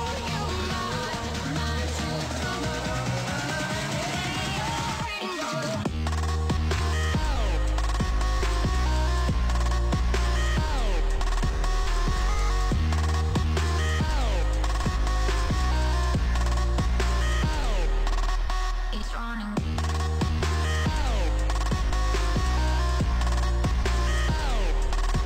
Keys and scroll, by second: 23.7 m.